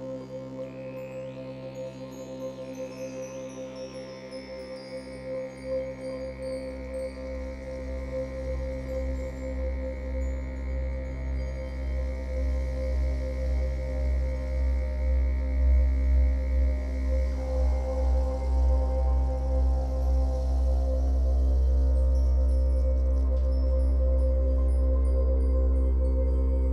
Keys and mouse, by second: 3.6-3.9 typing, 4.6 Return, 5.5 click, 5.6 typing, 6.2-7.3 drag, 7.8-9.0 drag, 9.6 click, 11.1 typing, 11.2 drag, 11.8 click, 12.5 Delete, 13.3 click, 14.1 typing, 14.4 click, 15.3 click, 15.9 click, 16.1-17.1 typing, 18.7 click, 20.4-23.1 drag, 23.1-23.6 typing, 24.7 click, 25.4 click, 26.1 click.